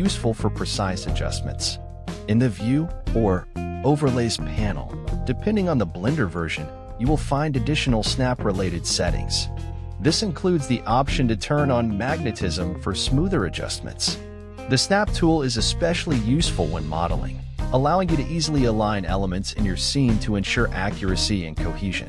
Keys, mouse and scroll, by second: 0.5 scroll down 2, 0.7-2.1 middle drag, 2.1 g, 3.0 middle click, 4.0 ctrl+z, 4.2 ctrl+z, 5.0-6.7 drag, 6.7 g, 7.6-9.0 middle drag, 9.0 ctrl+z, 9.7-11.4 drag, 11.4-11.8 scroll up 1, 11.8 g, 13.1 scroll up 1, 13.3 middle click, 14.0 g, 14.8 middle click, 15.8 ctrl+z, 16.5 ctrl+z, 17.1-18.3 drag, 18.3-18.7 scroll down 3, 18.7 middle click, 19.7 g, 21.5 g.